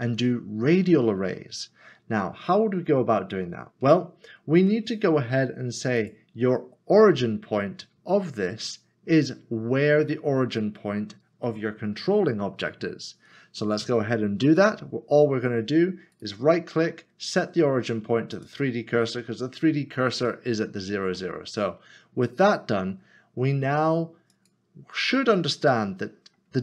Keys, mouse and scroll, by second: 3.5 scroll up 1, 6.1 click, 16.1 right click, 18.3 click, 21.1 click, 21.3 middle click, 22.3 shift+middle click, 24.5 click, 25.6 middle click.